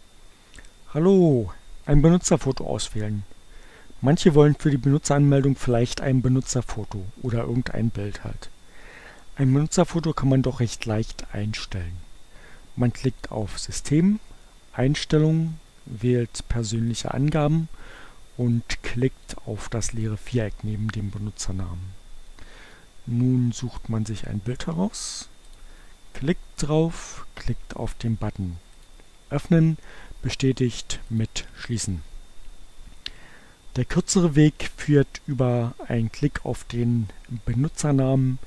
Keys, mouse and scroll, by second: 13.2 click, 17.0 click, 18.6-19.8 drag, 20.1 click, 21.8-23.3 drag, 25.6 click, 28.6 click, 31.2 click.